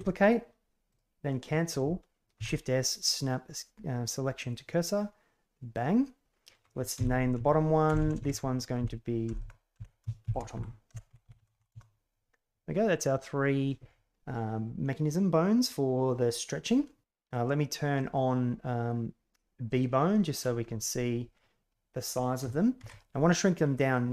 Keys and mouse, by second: 2.3 shift+s, 4.9-5.7 middle drag, 6.9 F2, 7.9 BackSpace, 8.1 BackSpace, 8.7 Left, 9.4 BackSpace, 11.3 t, 13.1 middle click, 18.0-19.8 drag, 20.6 middle click, 21.6 a, 22.7 ctrl+alt+s.